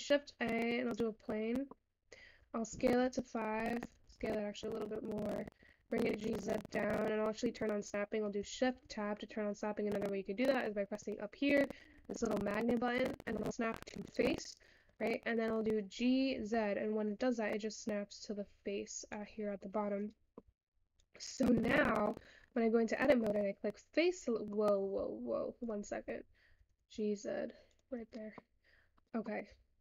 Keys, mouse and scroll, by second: 1.9 middle click, 2.6 s, 6.8 middle click, 6.9-7.7 scroll up 2, 8.3 middle click, 8.7 shift+Tab, 10.5 click, 13.0-15.8 drag, 15.8-16.3 scroll up 2, 16.3 g, 19.9-21.1 scroll up 3, 21.1 click, 22.6-25.1 middle drag, 25.1 Tab, 26.3 click, 28.8-29.2 scroll up 3, 29.2 middle click.